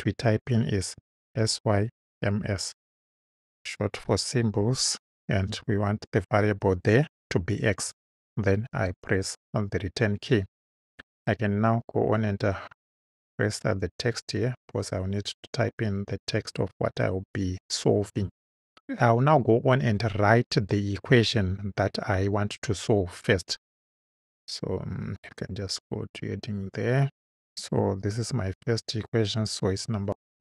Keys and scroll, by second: 0.9-2.9 typing, 5.5 x, 8.7 Return, 28.6 |, 30.0 ..